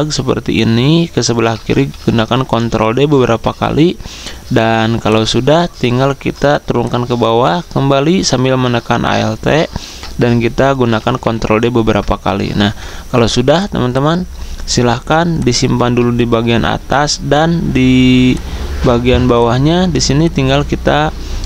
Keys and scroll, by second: 1.8 ctrl+d, 10.8 ctrl+d.